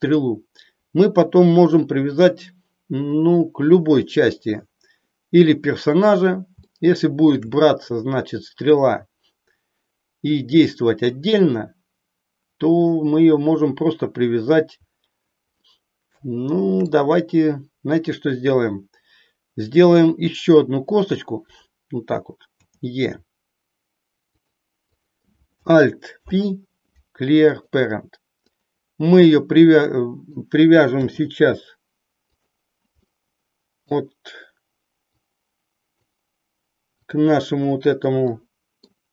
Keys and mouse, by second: 6.8 shift+middle click, 15.6-17.0 shift+middle drag, 20.8-21.8 drag, 22.6 e, 24.9 click, 26.1 alt+p, 28.4-30.3 drag, 31.0 r, 32.9-33.9 middle drag, 35.3 click, 37.0 click, 38.3 middle click.